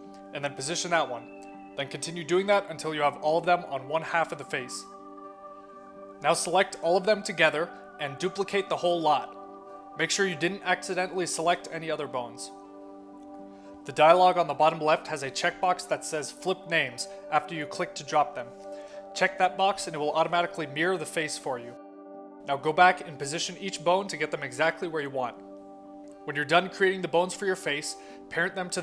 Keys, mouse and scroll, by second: 0.6 shift+d, 2.1 click, 2.7 shift+d, 3.1 click, 3.5 shift+click, 5.2 middle click, 5.8 shift+middle click, 7.6 click, 8.1 shift+middle click, 8.8 shift+click, 9.0 shift+click, 9.2 shift+click, 9.5 shift+click, 10.2 shift+click, 10.4 shift+click, 10.5 shift+click, 10.7 shift+click, 11.4 shift+click, 11.6 shift+click, 11.8 shift+click, 12.0 shift+click, 12.2 shift+click, 13.3 shift+click, 13.5 shift+click, 13.8 shift+click, 14.1 shift+scroll up 2, 14.5 shift+click, 14.7 shift+click, 14.9 shift+click, 15.0 shift+click, 15.2 shift+click, 15.8 shift+click, 16.0 shift+click, 16.2 shift+click, 16.4 shift+click, 17.3 shift+d, 18.2 click, 20.0 click, 20.9-22.1 drag, 22.3-22.8 scroll up 2, 23.4 click, 24.0 middle click, 24.6 click, 24.7 click, 25.2 click, 25.3 click, 26.1 middle click, 26.5 click, 26.7 click, 26.9 click, 27.1 middle click, 27.5 click, 27.7 click, 27.9 click, 28.1 click, 28.2 click, 28.6 click.